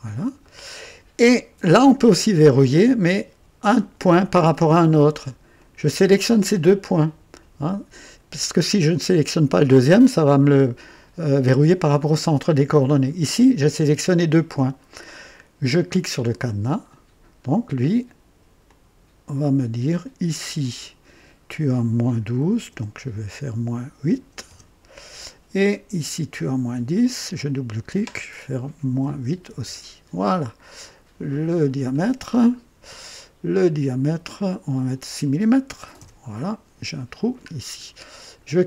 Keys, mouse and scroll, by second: 0.4 right click, 3.7 click, 5.5 click, 10.3-13.0 right drag, 16.4 click, 18.6-20.2 drag, 20.4 click, 22.6 KP_Subtract, 24.0 KP_8, 24.4 KP_Enter, 26.0-27.0 drag, 27.2 click, 28.9 -, 29.2 KP_8, 29.5 Return, 31.6 click, 34.2 click, 35.7 KP_6, 36.0 Return, 37.0 typing, 37.5 scroll down 1, 38.1 right click.